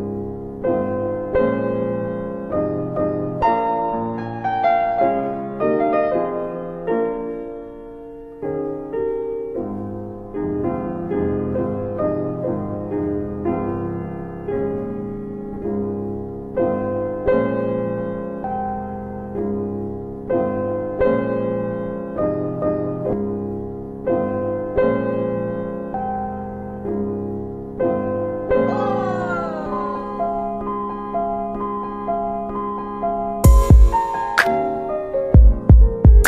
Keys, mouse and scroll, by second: 0.6 click, 0.6 middle click, 0.6-1.2 scroll down 2, 1.2 middle click, 3.2 click, 5.9 click, 9.7 middle click, 10.2 ctrl+alt+middle click, 11.8 click, 13.2 click, 15.1 ctrl+click, 15.8 ctrl+z, 16.2 ctrl+click, 17.4 q, 19.9 ctrl+BackSpace, 21.3 alt+middle click, 21.8 middle click, 23.8 ctrl+alt+middle click, 25.0 click, 26.2 ctrl+click, 27.4 ctrl+BackSpace, 28.4 click, 34.5 w, 35.8 click.